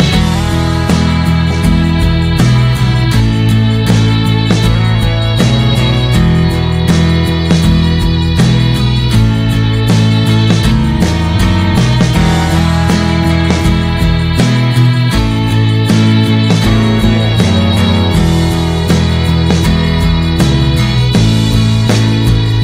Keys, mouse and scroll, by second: 0.1 scroll up 1, 0.1 r, 1.8 click, 2.9 click, 6.6 scroll down 1, 7.2 click, 16.0 middle click, 16.5 ctrl+s, 16.7 click, 18.1-19.2 drag, 19.2 scroll down 1, 19.4-21.4 middle drag, 21.4 scroll down 2, 21.9-22.6 drag.